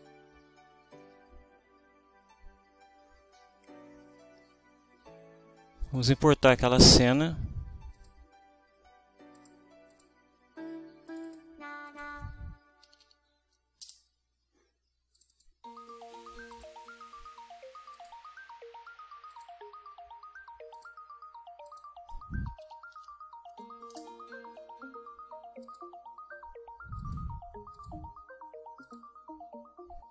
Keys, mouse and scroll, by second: 5.8 click, 7.9 click, 9.3 click, 9.9 click, 11.1 click, 11.9 click, 12.7-13.6 typing, 13.8 Return, 15.1 click, 16.6 click, 17.9 click, 19.3 click, 20.7 click, 21.7 click, 22.2-24.0 typing, 25.6 click, 27.0 click, 27.7 click, 28.8 click.